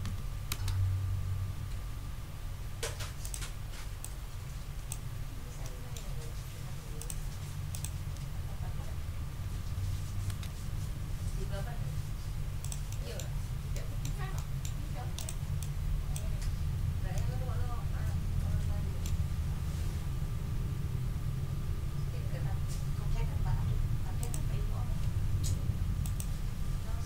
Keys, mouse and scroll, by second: 0.0 4, 0.5 Return, 3.2 click, 4.0-5.1 drag, 5.2 ctrl+scroll down 2, 5.6 ctrl+click, 7.0 click, 7.7 click, 8.9-10.2 typing, 10.3 Return, 12.6 click, 13.0 click, 13.3 ctrl+scroll down 2, 14.3 ctrl+click, 14.8 ctrl+scroll down 2, 15.2 ctrl+click, 15.6 ctrl+click, 16.4-17.0 ctrl+scroll up 3, 17.1-19.2 ctrl+middle drag, 24.2 click, 26.0 click.